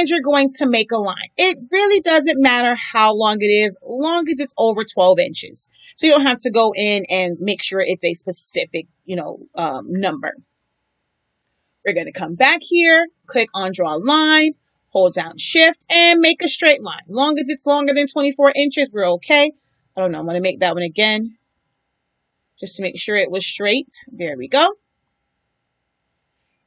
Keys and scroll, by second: 19.5 Delete.